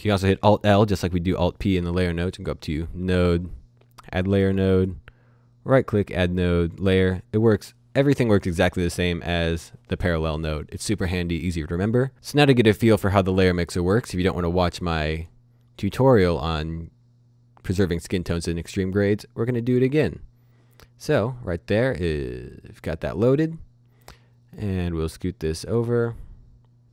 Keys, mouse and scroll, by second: 0.4 click, 2.3 click, 4.7 right click, 5.7 click, 8.5 click, 9.2 Delete, 12.1 click, 15.1 click, 15.8 right click, 19.7 click, 22.7 click, 23.5-23.9 scroll down 1, 23.9 middle click, 26.8 click.